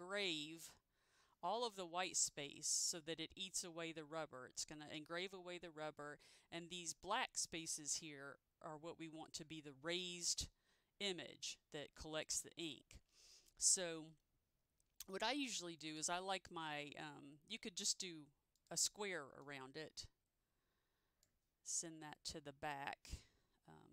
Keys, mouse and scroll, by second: 18.7 click, 19.6 click.